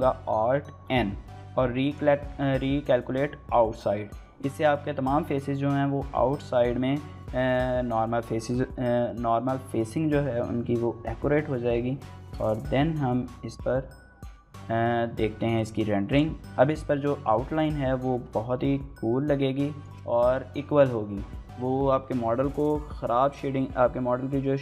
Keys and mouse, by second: 12.2 KP_0.